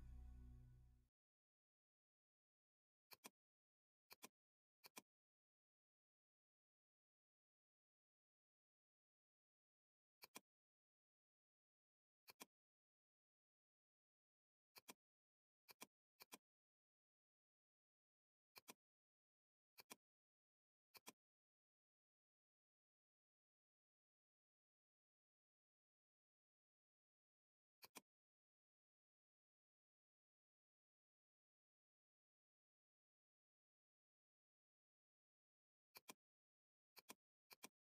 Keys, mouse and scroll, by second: 1.6 [, 1.8 [, 2.2 [, 3.1-6.5 drag, 6.5 [, 8.6 [, 10.2-12.3 drag, 13.9 ctrl+z, 14.8-26.8 drag, 26.8 ctrl+=, 27.8 click, 27.9-34.8 drag, 35.9-37.9 drag.